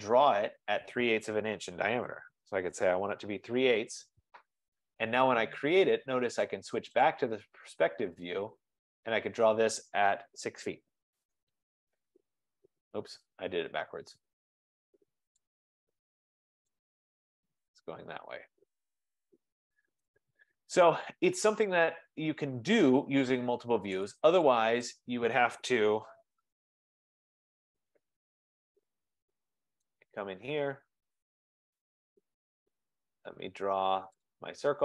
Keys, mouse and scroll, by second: 1.7-3.0 typing, 7.3 click, 7.6 click, 8.4-8.7 scroll down 7, 10.8-11.2 scroll, 10.8-11.2 typing, 11.3 Return, 13.2 scroll, 15.7 click, 17.3 F15, 20.0 right click, 24.1 click, 25.1 click, 25.7-26.9 typing, 27.6-29.2 scroll, 28.3 Delete, 29.9 right click, 32.1 click, 34.3 click.